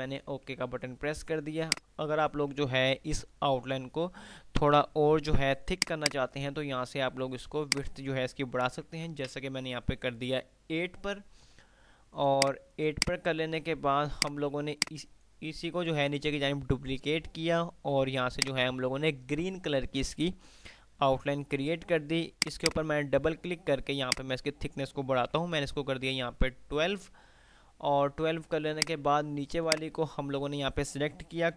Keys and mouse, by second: 0.8 F3, 1.9 click, 2.3-2.8 F2, 5.9 click, 12.6 click, 14.9-18.1 right drag, 18.6 right click, 22.6 click, 28.9 click.